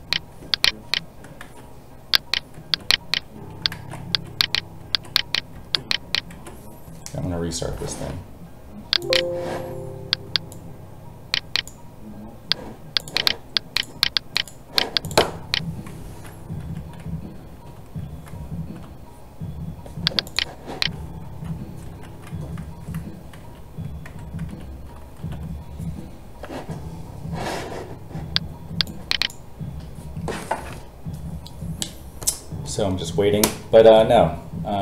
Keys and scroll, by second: 1.4 ctrl+z, 3.7 ctrl+z, 12.4 space, 14.5 space.